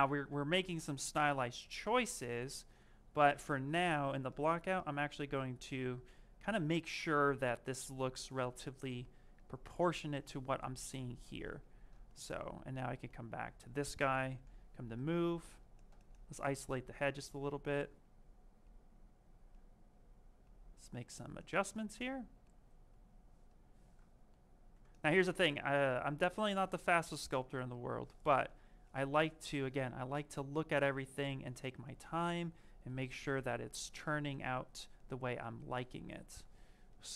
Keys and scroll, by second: 1.0 q, 3.9 shift+f, 16.5 s, 24.5 s, 28.1 shift+f, 36.1 s.